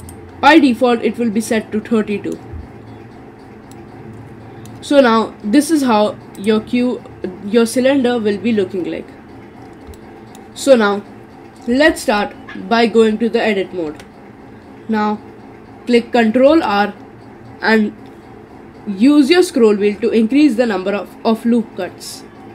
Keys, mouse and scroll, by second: 0.0 click, 0.6-3.7 middle drag, 3.7-6.4 middle drag, 6.4 click, 9.3-9.8 scroll up 3, 9.8 scroll down 3, 10.0-13.1 middle drag, 13.9 Tab, 14.4-16.5 scroll up 4, 16.5 ctrl+r.